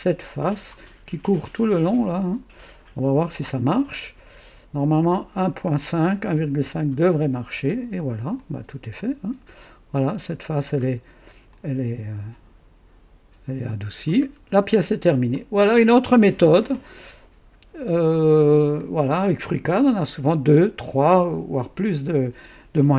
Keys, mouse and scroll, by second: 0.3 click, 4.8 click, 6.0 KP_1, 6.3 KP_Decimal, 6.5 KP_5, 6.8 KP_Enter, 8.3-10.4 drag, 10.4 typing, 10.7 scroll up 1, 11.5-14.2 drag, 14.2-14.5 scroll down 1, 15.3-16.5 drag, 18.7-22.9 drag.